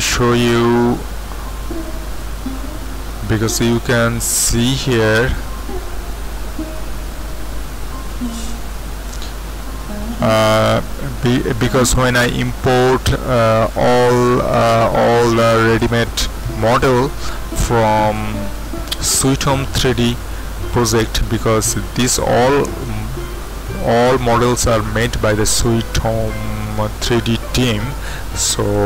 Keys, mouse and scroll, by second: 1.5 z, 3.1 middle click, 4.4 middle click, 6.8 Tab, 8.5 z, 9.2-10.3 middle drag, 14.8 middle click, 28.7 click.